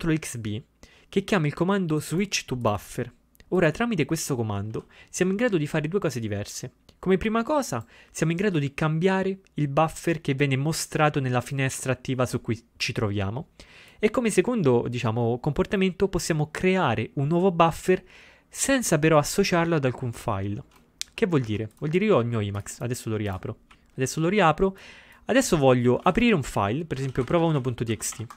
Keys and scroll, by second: 23.7 typing, 26.1 ctrl+x, 26.3 ctrl+f, 26.8-28.3 typing.